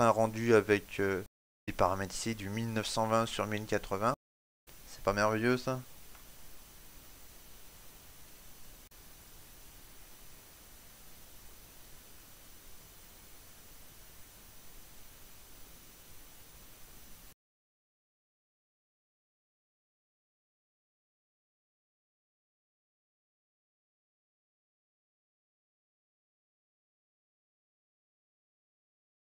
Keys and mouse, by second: 4.0 shift+middle click, 4.1 right click, 4.8 KP_Decimal, 6.4 ctrl+s, 8.8 click.